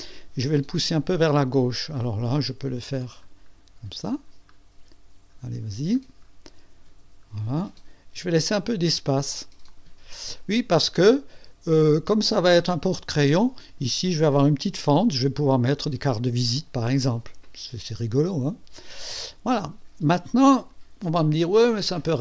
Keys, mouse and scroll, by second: 2.4 click, 3.0-4.4 scroll down 3, 4.5 scroll down 1, 5.3-5.9 scroll down 2, 6.5-7.1 scroll down 4, 8.2 scroll up 2, 9.7 click, 9.8 click, 10.3-12.8 drag, 13.4 click, 14.9 click, 16.5-22.2 drag.